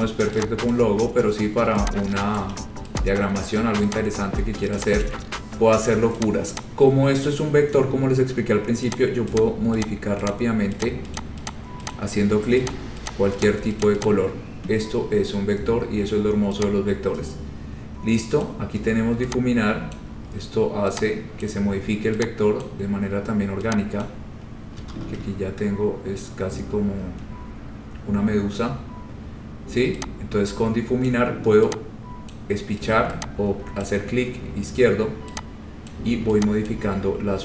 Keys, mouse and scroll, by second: 0.0 ctrl+click, 0.9 click, 2.5 shift+click, 3.4 click, 3.6 scroll down 2, 4.1 click, 5.2 click, 5.2-5.7 scroll, 6.4 click, 6.8 click, 7.0 scroll, 9.1 click, 9.6 click, 10.0 click, 10.4 click, 11.0 click, 11.3 click, 11.7 click, 11.9 scroll, 12.1 click, 12.8 click, 13.2 click, 13.6 click, 14.0 click, 14.2 click, 18.6 click, 20.1 click, 21.6 click, 22.8 click, 24.2 click, 25.1 ctrl+z, 25.6-26.9 scroll, 31.2 click, 32.5 click, 34.0 click, 36.1 click, 36.8 click.